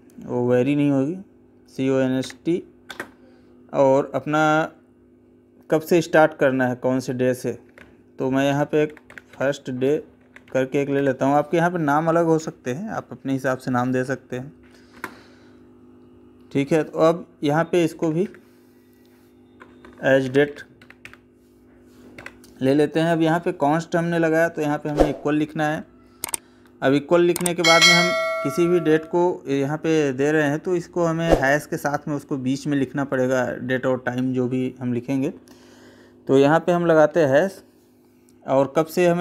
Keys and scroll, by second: 2.7 space, 14.7 space, 19.4 space, 22.0 Tab.